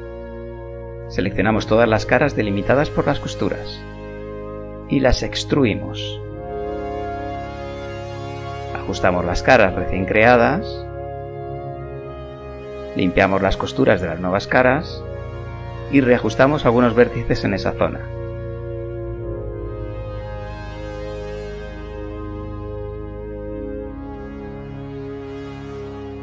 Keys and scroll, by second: 4.8 e, 7.1 KP_1, 8.7 r, 9.5 s, 11.2 z, 12.7 KP_1, 14.7 b, 16.3 g, 17.3 g, 19.6 g, 20.4 g, 21.3 g, 23.0 g, 25.8 Tab.